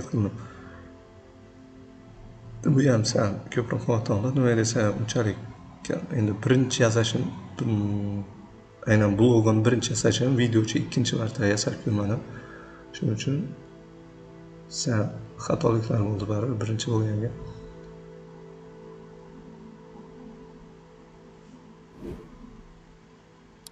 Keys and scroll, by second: 0.9 c, 3.0 ctrl+z, 3.3 p, 5.9 c, 8.3 v, 8.7 ctrl+z, 8.9 ctrl+z, 9.5 ctrl+z, 9.8 p, 11.2 c, 16.5 v, 17.0 c, 18.5 v, 20.7 p, 21.4 v.